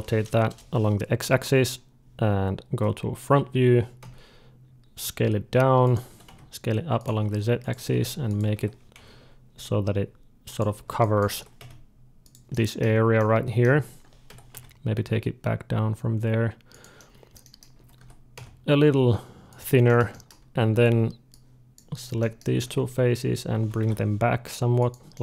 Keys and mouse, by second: 2.1 d, 3.8 d, 4.8 s, 5.9 s, 7.0 s, 7.6 s, 8.4 g, 10.8-12.8 drag, 11.2 g, 12.8-14.4 middle drag, 14.1 g, 15.0-16.8 drag, 17.6 a, 17.8 s, 19.3 click, 19.7-21.1 middle drag, 20.5 z, 21.1-22.5 drag, 22.4 d, 22.5-24.0 middle drag, 23.4 g, 25.0-25.2 middle drag.